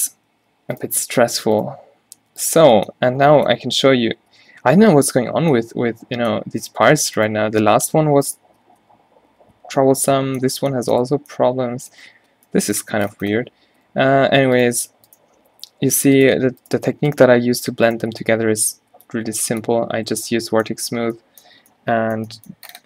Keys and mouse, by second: 0.2 ctrl+z, 3.0-4.1 middle drag, 4.1-5.5 typing, 7.3-8.3 middle drag, 9.1 q, 9.6 q, 9.8 q, 11.2 Tab, 13.3 Tab, 14.0 a, 15.9 a, 18.5 q, 18.9 a, 19.1 b, 20.1 q, 20.3 Tab, 21.5 a.